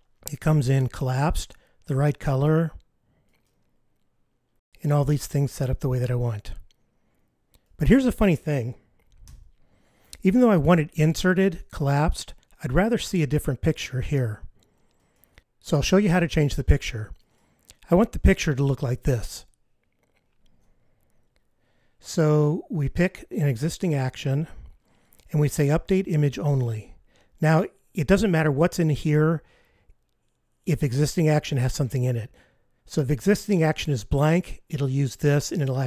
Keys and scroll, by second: 9.3 F15, 20.7 super+F15.